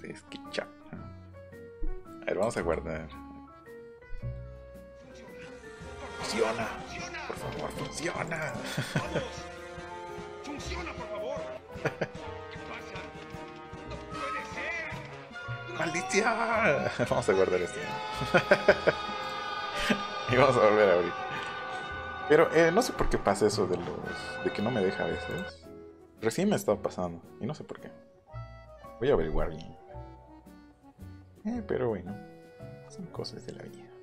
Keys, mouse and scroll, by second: 0.5 middle click, 0.8 middle click, 2.5 ctrl+s, 5.3 middle click, 5.6 scroll up 1, 7.7 middle click, 8.0 scroll up 1, 8.3 click, 8.7 right click, 10.6 click, 11.7 Escape, 12.1 middle click, 15.4 click, 17.8 click, 19.2 click, 19.7 click, 25.3 click.